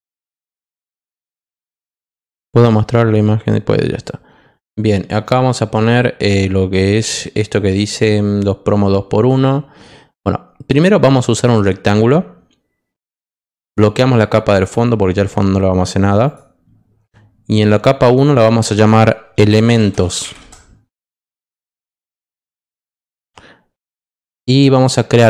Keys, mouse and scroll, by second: 12.9 click, 13.6 click, 14.6 click, 16.2 click, 18.0 click, 19.1-20.7 typing, 22.0 click, 23.8 click.